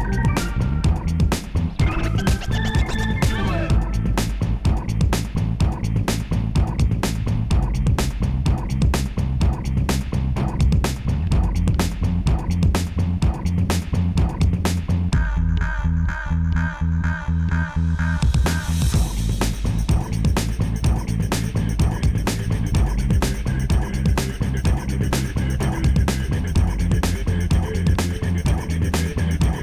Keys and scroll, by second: 21.7 0, 23.4 Tab, 26.8 Tab.